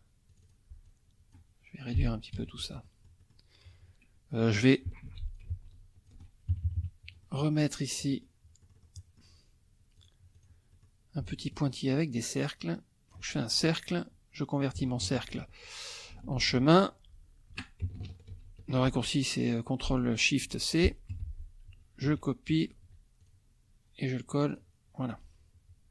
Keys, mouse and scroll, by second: 0.3 click, 0.8 click, 1.9 Delete, 2.3 F1, 2.8 click, 5.0 ctrl+d, 5.3 ctrl+shift+click, 6.5 ctrl+shift+KP_Subtract, 7.2 ctrl+shift+click, 8.0 click, 8.6 click, 10.0 click, 10.4 click, 10.7 click, 11.2-13.3 ctrl+shift+drag, 16.4 ctrl+alt+c, 18.3 ctrl+shift+c, 20.4 F2, 21.1 F1, 22.0 ctrl+x, 22.8 ctrl+z, 23.2 ctrl+click, 24.5 click.